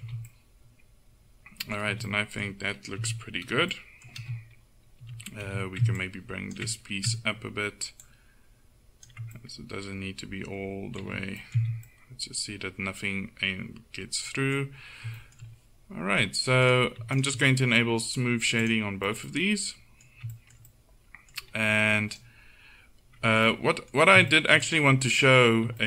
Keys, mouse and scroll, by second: 0.1 z, 1.9 z, 3.1 KP_1, 5.2 a, 5.5 a, 6.2-7.8 drag, 8.1 click, 9.5-11.1 middle drag, 11.1 Tab, 11.6 z, 14.8 middle click, 16.7-19.0 right drag, 18.6 click, 19.1-20.6 middle drag, 22.2-24.0 right drag.